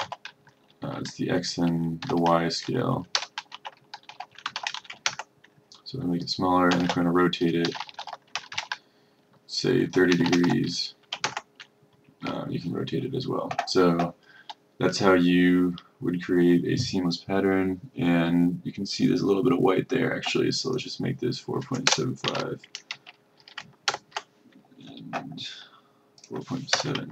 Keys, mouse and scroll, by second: 2.1-4.7 typing, 5.2 Return, 7.1-9.1 typing, 10.3 3, 10.6 shift+0, 20.7 click, 22.0 BackSpace, 22.3 KP_7, 24.0 Return, 26.3 click, 26.9 BackSpace.